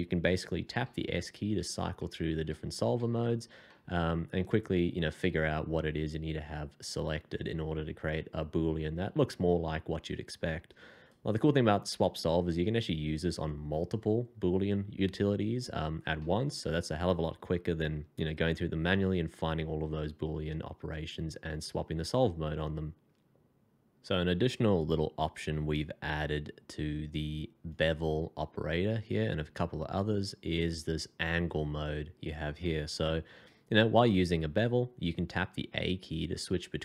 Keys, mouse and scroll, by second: 0.8-2.9 typing, 3.6 middle click, 16.2 middle click, 26.1 f.